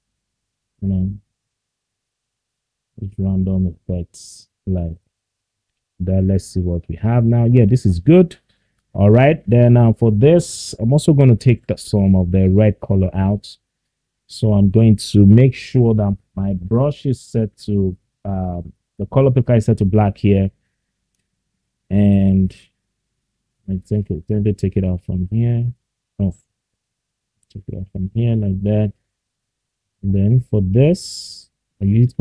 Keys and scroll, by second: 24.3 ctrl+z, 25.8 ctrl+z.